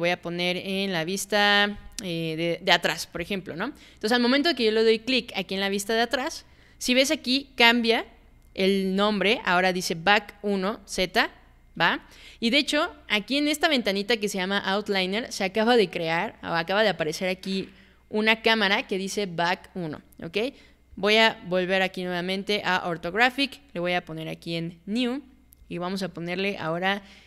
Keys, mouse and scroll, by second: 3.2 click, 20.9 click.